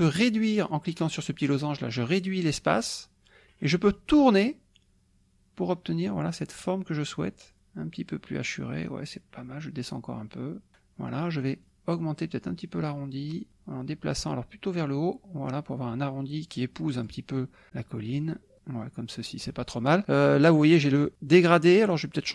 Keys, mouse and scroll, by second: 1.5-10.7 drag, 11.6-17.3 drag, 18.6-19.6 drag, 22.0-22.3 drag.